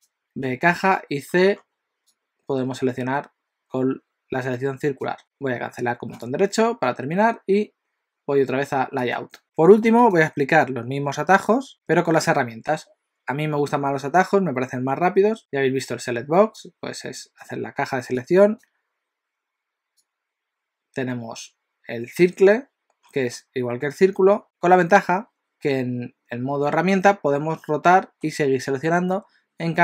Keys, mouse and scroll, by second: 9.0 click, 10.0 click, 15.4 click, 16.6 click, 18.3 click, 20.2 click, 23.0-23.9 scroll down 7, 23.9-24.4 scroll up 6, 27.1 middle click, 29.1 middle click.